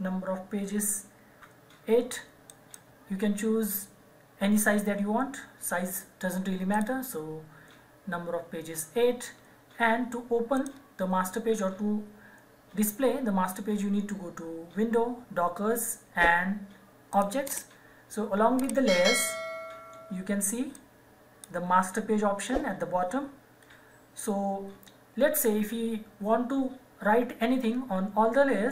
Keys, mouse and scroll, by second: 2.5 click, 6.7 click, 10.5 click, 17.1 click, 20.7 click.